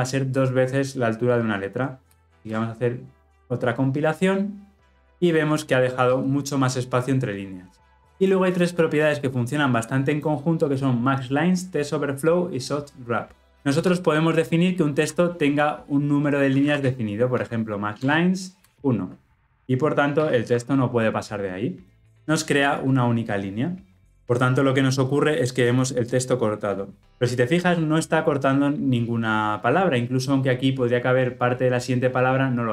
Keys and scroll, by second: 17.9 Return.